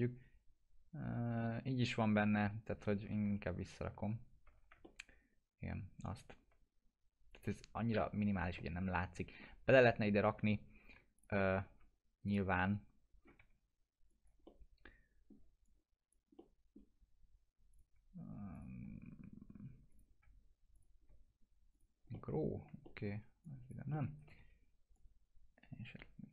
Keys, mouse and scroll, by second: 3.2 ctrl+z, 4.8-7.9 alt+middle drag, 8.6-11.1 alt+middle drag, 11.1 click, 11.4 F4, 12.2 click, 12.7 scroll up 1, 13.4 1, 14.1 click, 14.4-15.4 alt+middle click, 15.6-16.2 click, 16.3-17.0 alt+middle drag, 17.7 click, 18.5 shift+click, 19.9 click, 20.7 shift+click, 21.7 click, 22.1-22.7 alt+middle click, 23.4 alt+click, 23.9 alt+middle click, 24.0-24.9 typing, 24.9-26.3 drag.